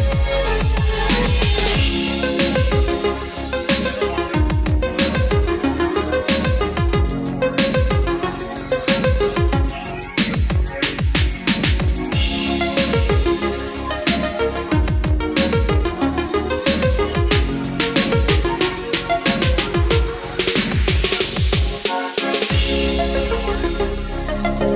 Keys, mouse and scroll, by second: 0.5-9.6 drag, 10.3-11.0 scroll up 1, 12.7 space, 12.8-17.7 drag, 17.9-18.7 scroll down 1, 18.7 click, 19.5 F4, 21.2 click.